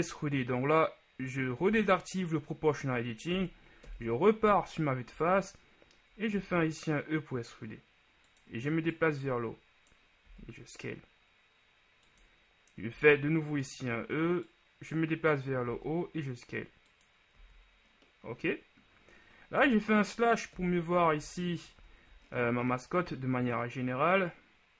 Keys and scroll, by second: 1.9 ▯, 4.0 KP_1, 5.3 z, 10.5 s, 13.1 e, 15.9 s, 19.7 KP_Divide, 20.7 KP_1, 21.3 Tab, 21.9 a.